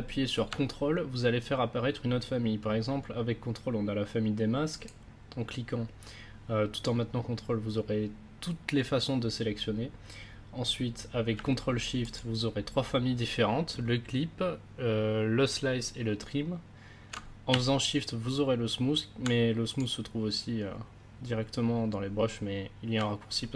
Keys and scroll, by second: 11.3 ctrl+s.